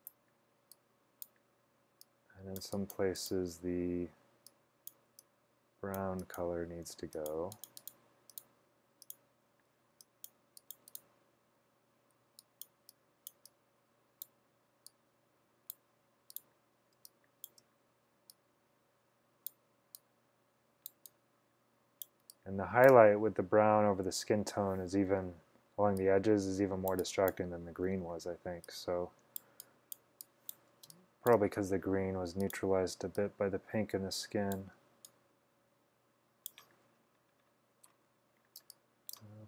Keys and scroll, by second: 5.2 x, 7.0 x, 9.9 x, 12.3 x, 17.0 space, 17.6 space, 22.3-23.0 typing, 25.1-25.9 typing, 27.9-28.6 typing, 31.0 space, 38.7 space, 39.2 space.